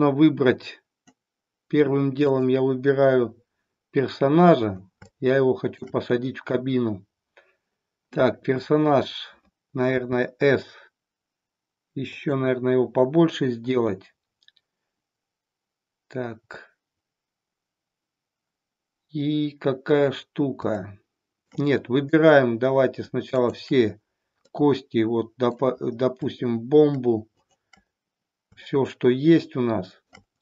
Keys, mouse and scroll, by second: 2.3 click, 5.1-5.9 shift+middle drag, 9.8 s, 20.7-21.6 shift+middle drag, 23.2 shift+click, 24.6-25.7 middle drag, 27.3 shift+click, 29.1-30.1 shift+middle drag.